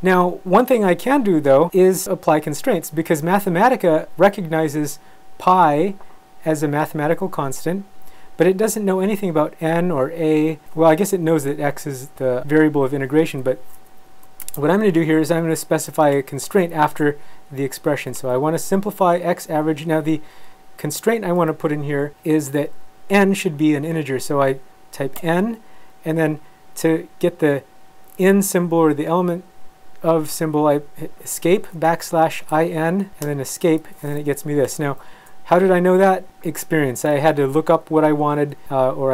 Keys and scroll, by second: 14.3 ,, 25.2 n, 31.3 Escape, 31.9-33.0 typing, 33.2 Escape.